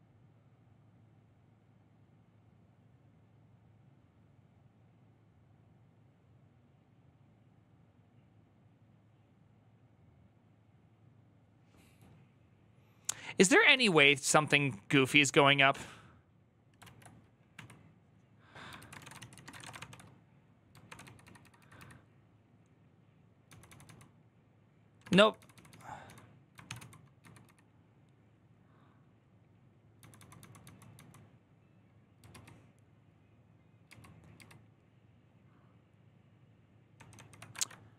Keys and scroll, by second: 16.7 alt+{, 17.3 q, 18.5-21.5 typing, 20.6 ctrl+d, 23.2-25.5 typing, 26.4 ctrl+c, 26.5-27.5 typing, 29.8-30.4 typing, 31.8-32.6 typing, 33.6 ctrl+u, 37.3 ctrl+d.